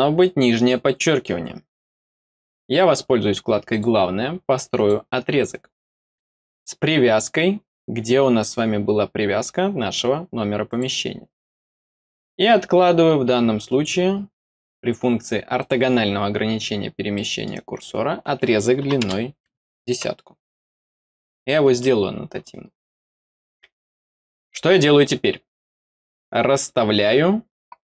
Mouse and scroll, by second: 3.6 click, 4.7 click, 7.2 scroll down 2, 10.6 click, 11.9 scroll down 1, 15.5 click, 16.7 scroll down 1, 17.1 middle click, 20.7-21.0 scroll up 1, 22.3 middle click, 24.4 middle click.